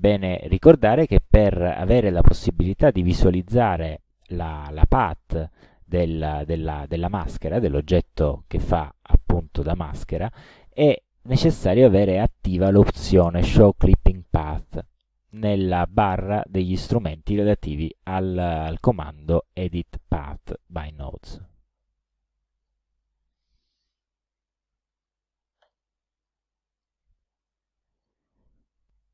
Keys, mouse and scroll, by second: 22.2 middle click, 25.0 click, 25.7 click, 26.3 middle click, 27.4 click.